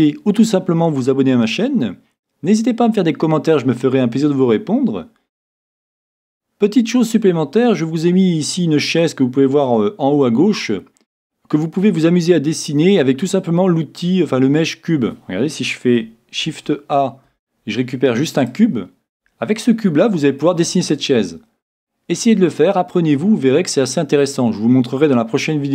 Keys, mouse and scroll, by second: 16.6 s, 19.6-21.5 middle drag.